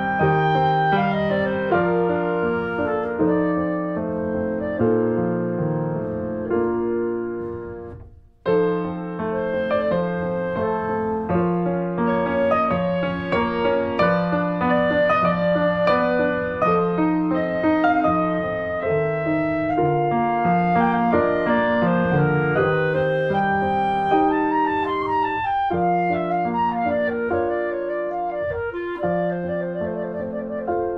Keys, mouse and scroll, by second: 0.3 click, 1.4 click, 2.2 shift+middle click, 2.7 click, 3.1 shift+click, 3.7 click, 4.6 shift+middle click, 5.1 click, 6.4 shift+middle click, 6.9 click, 7.7 click, 8.1 shift+middle click, 8.8 ctrl+shift+b, 10.9 scroll up 1, 11.1 shift+middle click, 11.4 click, 11.8 click, 12.3 shift+click, 12.7 s, 15.6-17.0 middle drag, 17.0 click, 17.5-19.0 drag, 19.5 click, 19.9 alt+middle click, 20.5 scroll down 1, 20.7 alt+middle click, 21.0 scroll up 2, 21.2 alt+middle click, 21.7-22.6 scroll up 2, 22.0 middle click, 22.6-22.9 scroll down 1, 22.9 alt+middle click, 23.3-24.2 scroll up 2, 23.7 shift+middle click, 24.2 click, 25.2 click, 26.7 click, 27.8 click, 28.1-29.7 middle drag, 29.7 Tab, 30.0 Tab.